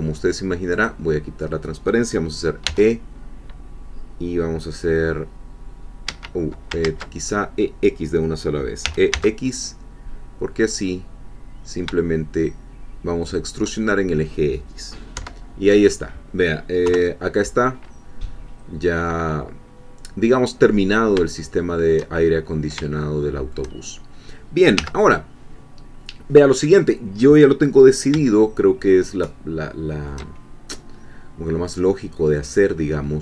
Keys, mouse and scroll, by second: 0.8 click, 2.6 e, 6.1 Escape, 6.8 ctrl+z, 8.8 e, 9.1 x, 13.2 shift+click, 15.1 1, 16.8 3, 20.6 scroll down 1, 21.4 shift+middle click, 22.2-22.8 shift+scroll up 1, 23.0-24.1 shift+middle drag, 24.1-24.4 shift+scroll down 1, 24.8 1, 28.4-29.5 shift+drag, 29.5-30.6 shift+middle drag, 33.0-33.2 scroll up 2.